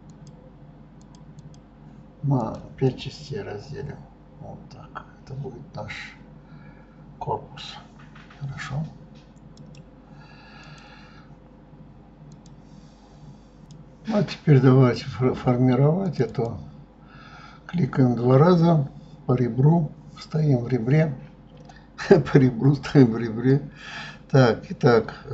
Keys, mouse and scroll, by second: 1.5 click, 2.5 click, 2.9-6.1 middle drag, 9.6 click, 10.7 click, 16.2 click, 16.5 click.